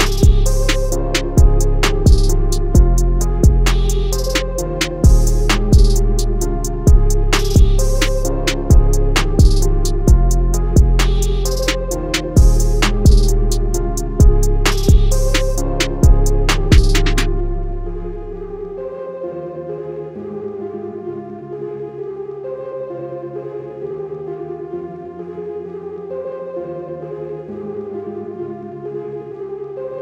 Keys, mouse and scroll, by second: 17.0 right click, 22.3 click, 24.2 click.